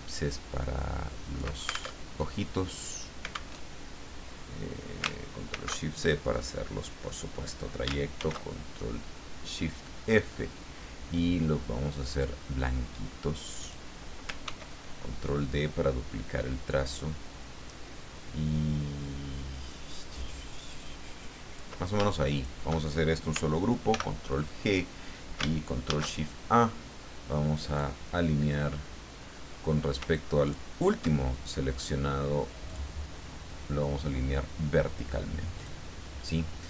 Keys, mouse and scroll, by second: 2.0 ctrl+alt+Tab, 3.6 alt+Tab, 5.5 ctrl+shift+c, 8.2 ctrl+shift+f, 11.1-12.4 drag, 13.6 click, 14.4 ctrl+d, 15.2-21.7 ctrl+drag, 22.3 shift+click, 23.9 ctrl+g, 25.8 ctrl+shift+a, 27.7 click, 30.4 shift+click, 32.7 click, 35.6 click.